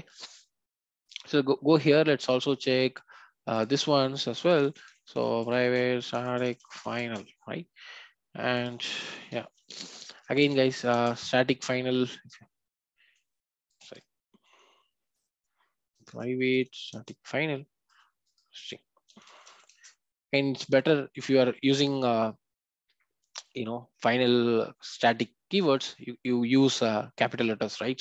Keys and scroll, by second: 1.0 ctrl+b, 14.4 Delete, 17.0 Delete.